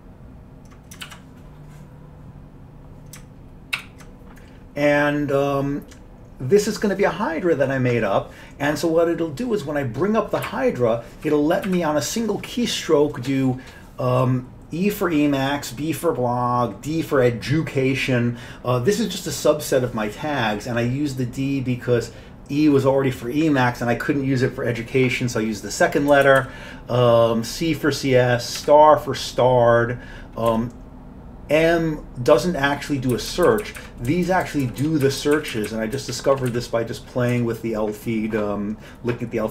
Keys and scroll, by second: 1.0 alt+w, 3.8 ctrl+y, 10.5 Up, 11.0 Up, 11.2 Up, 11.7 Up, 26.1 Down, 26.3 Down, 26.4 Down, 28.6 Down, 30.5 Down, 33.1 Up, 33.3 Up, 33.5 Up, 33.6 Up, 33.8 Up, 34.1 Down, 34.3 Down, 34.5 Down, 34.7 Down, 34.9 Down, 35.1 Up, 35.2 Up, 35.4 Up, 35.6 Up, 35.7 Up, 36.0 Down, 36.1 Down, 36.5 Down, 37.4 Down.